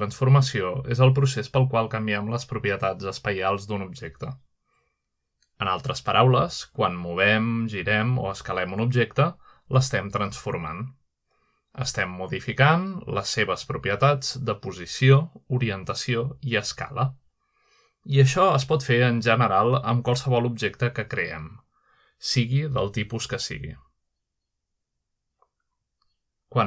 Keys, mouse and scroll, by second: 1.9 click, 2.7 click, 4.0-5.0 drag, 6.1-7.6 drag, 8.0 shift+middle drag, 9.0 shift+middle drag, 9.8-10.7 shift+middle drag, 12.8 shift+middle click, 13.6-14.1 shift+middle drag, 15.3-16.5 shift+middle drag, 16.5 shift+c, 18.3-18.7 shift+middle drag, 19.0-20.2 shift+middle drag, 21.0-22.6 middle drag, 25.4-26.6 middle drag.